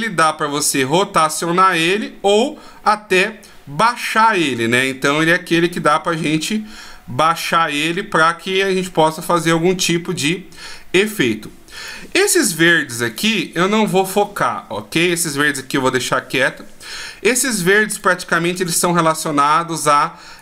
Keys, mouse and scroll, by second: 2.5 click, 6.3 middle click, 9.4 scroll down 1, 10.4 middle click, 11.1-12.1 scroll up 5, 12.0 middle click, 13.2 right click, 15.3 right click, 18.0 right click, 19.5 right click, 20.1 right click.